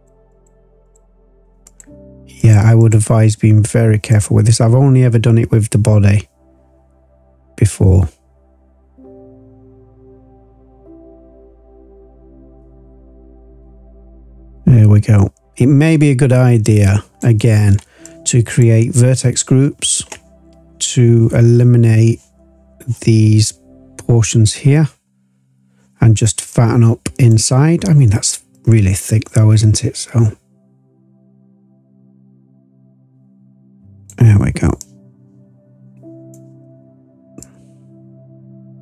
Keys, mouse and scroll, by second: 0.3 click, 0.8 click, 1.7 click, 2.4 click, 2.8 click, 4.0-17.2 drag, 18.0 click, 24.2 click, 26.4 click, 28.5-34.1 drag, 34.7-36.3 drag, 37.3-38.8 drag.